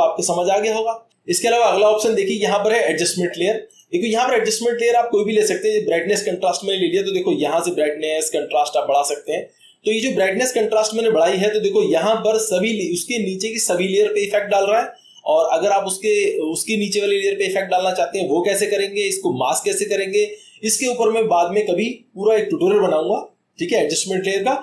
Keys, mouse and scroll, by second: 6.6 click, 8.2-10.4 drag, 12.1-13.2 drag.